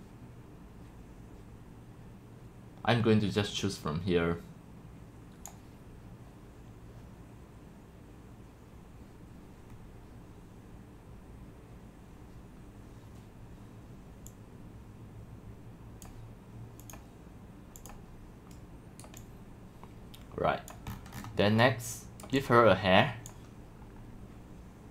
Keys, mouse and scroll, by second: 0.7 scroll down 1, 0.9 click, 1.3 drag, 1.6-2.4 scroll down 4, 1.8 click, 3.9-9.7 drag, 9.7-11.7 middle drag, 14.3-16.4 drag, 16.8 click, 17.8 click, 19.3-20.7 drag, 20.9-21.4 scroll, 22.4-23.3 drag.